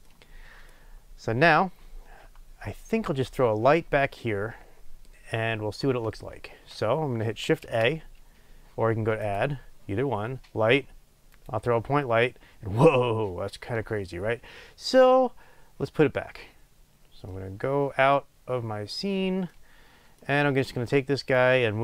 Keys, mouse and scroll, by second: 11.5-17.2 drag, 17.2-17.6 middle drag, 17.7 middle click, 17.9 middle click, 18.4 scroll down 2, 18.6 middle click, 19.4-21.3 middle drag, 21.3-21.8 drag.